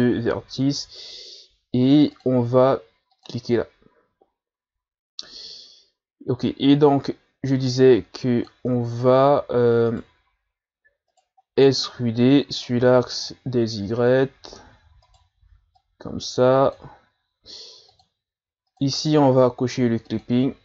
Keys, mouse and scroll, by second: 0.5-1.1 scroll up 3, 2.1-3.2 drag, 4.2-5.1 ctrl+scroll up 1, 7.7 click, 8.7 ctrl+z, 9.9 shift+right click, 11.1 shift+right click, 11.5 scroll down 1, 11.7-12.8 scroll up 4, 12.8 e, 15.8-20.2 drag.